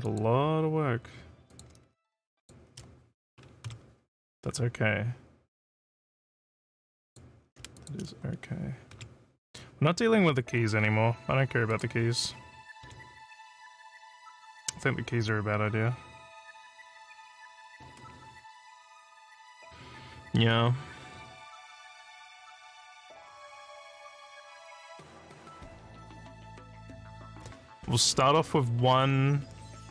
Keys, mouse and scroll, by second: 0.1 click, 1.5 click, 2.4 shift+click, 7.0 click, 7.7 shift+click, 10.7 scroll up 4, 11.7 click, 14.5 click.